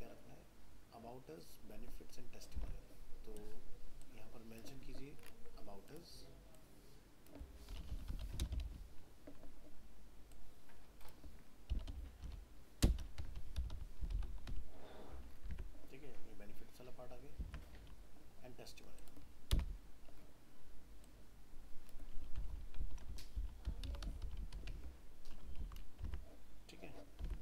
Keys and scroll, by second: 2.6 alt+Tab, 15.6 alt+Tab, 25.6 ctrl+s, 26.1 alt+Tab.